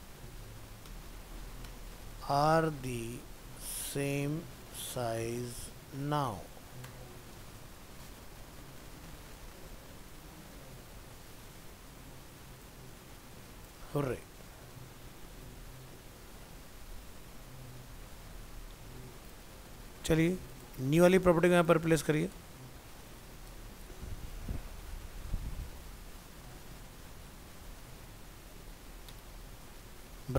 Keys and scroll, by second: 18.3 ctrl+s, 22.3 BackSpace, 23.5 ctrl+space, 29.4 ctrl+s.